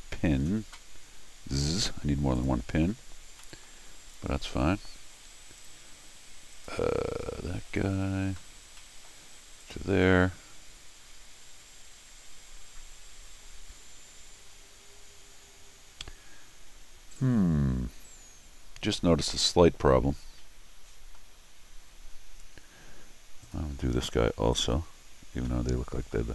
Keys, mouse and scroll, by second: 2.4 click, 3.3 middle click, 4.1 click, 5.6 click, 6.5 click, 7.3-8.1 scroll down 1, 8.8 middle click, 9.6 click, 19.4-21.1 middle drag, 23.4 click, 24.5 click, 25.5 middle click.